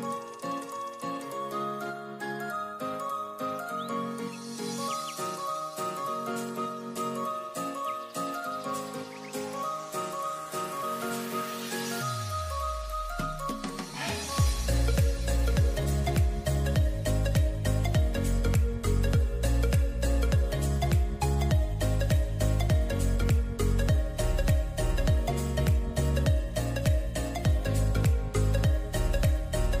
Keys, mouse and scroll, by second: 0.7 click, 1.4 click, 2.1 Tab, 2.6-4.6 scroll down 4, 5.3 s, 10.1 shift+d, 12.8 click, 13.7 click, 14.0 click, 14.8 g, 17.0 shift+d, 19.6 click, 20.6 click, 20.9 click, 21.1-21.8 scroll down 2, 21.8 click, 25.2-25.8 scroll up 3, 25.8 click, 28.1-29.8 drag.